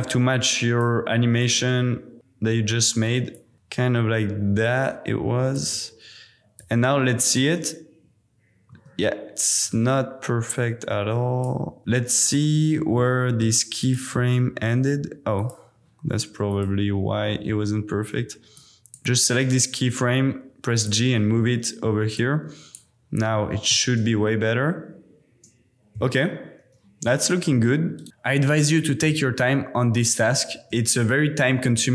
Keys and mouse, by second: 0.6 click, 1.4 click, 3.5 click, 6.6-7.3 drag, 7.4 space, 8.7 space, 9.5 click, 10.5 click, 11.8 space, 13.0-13.5 drag, 18.5-19.0 drag, 19.1 g, 20.8 click, 21.5 middle click, 22.1 click, 22.7 middle drag, 23.3-23.7 middle drag, 23.8 space, 25.9 space, 27.9 click, 28.1 super+s, 29.0 space, 30.8 space, 31.5 space, 31.8 space.